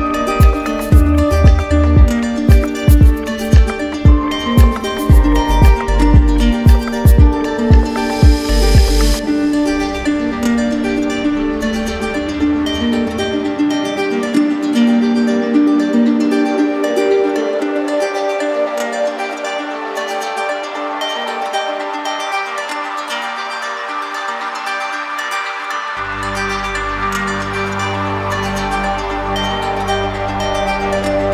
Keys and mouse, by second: 5.3-7.1 right drag, 7.1-8.1 alt+drag, 8.1 right click, 12.8-15.3 right drag, 15.3 click, 18.0 alt+click, 19.5 alt+click, 21.5 right click, 22.8 right click, 24.6 click, 26.3 right click, 27.8 shift+right click, 29.0-31.2 shift+right drag.